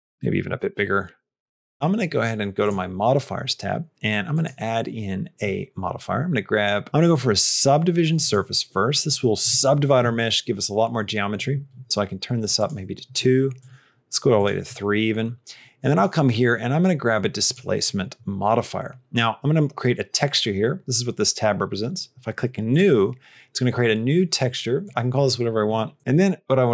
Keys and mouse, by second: 0.5-1.7 shift+middle drag, 2.5 click, 4.2-8.1 drag, 12.5 click, 14.2 click, 15.8-17.5 drag, 18.5 click, 18.9-20.2 middle drag, 22.6 click, 24.9-26.1 drag.